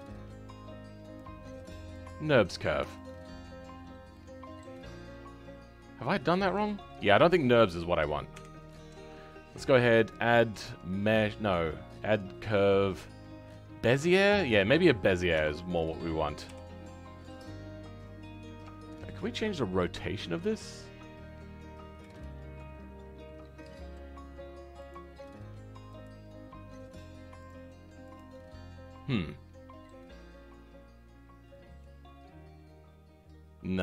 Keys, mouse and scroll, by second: 2.4-2.9 scroll up 3, 2.9 shift+middle click, 3.5-4.1 scroll up 2, 4.1-7.5 middle drag, 7.5 click, 8.8-14.4 scroll down 2, 16.4 KP_7.